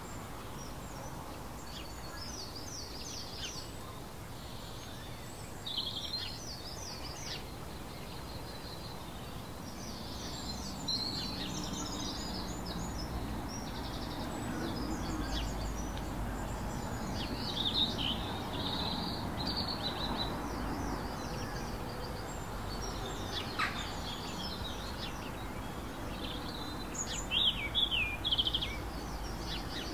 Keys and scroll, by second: 14.8 ctrl+alt+shift+e.